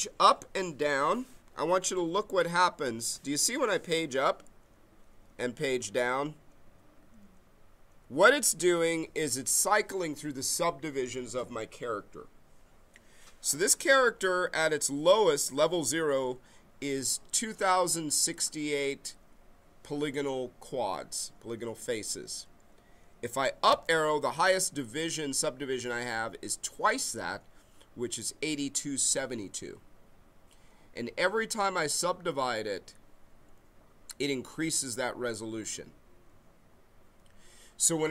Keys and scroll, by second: 1.9 Page_Up, 5.6 Page_Down, 7.0 Page_Up, 13.6 Page_Up, 14.3 Page_Down, 23.7 Page_Up.